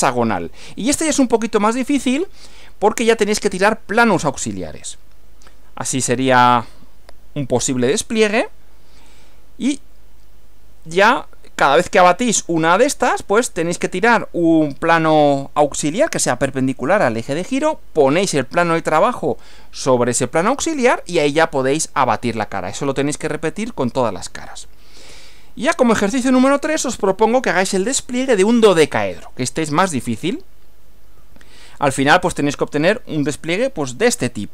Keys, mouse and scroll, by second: 4.9 Right, 9.2 Right, 25.1 Right, 31.2 Right.